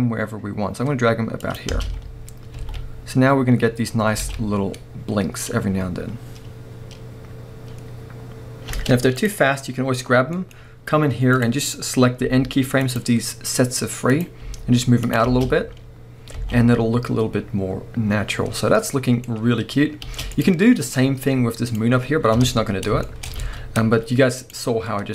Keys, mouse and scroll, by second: 1.5 click, 1.7 space, 4.3 a, 5.5 scroll down 1, 8.7 space, 9.2-9.5 drag, 9.5-10.3 scroll up 1, 10.3-11.4 middle drag, 10.5 scroll up 1, 11.4 click, 12.2 g, 13.0 click, 14.5 g, 15.1 click, 15.3 space, 16.4 alt+a, 17.2-18.0 scroll down 1, 18.2 scroll down 1, 18.8-20.3 middle drag, 20.1 space, 20.3-22.4 drag, 22.4 KP_0, 23.0-24.4 shift+middle drag, 23.3 scroll up 1, 23.4 alt+a, 24.4-24.9 drag, 24.9-25.1 scroll down 1.